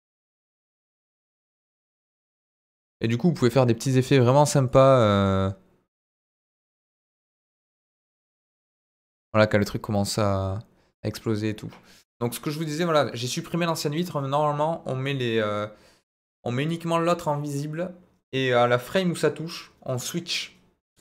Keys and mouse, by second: 0.2-2.4 middle drag, 4.6-8.3 drag, 11.1 click.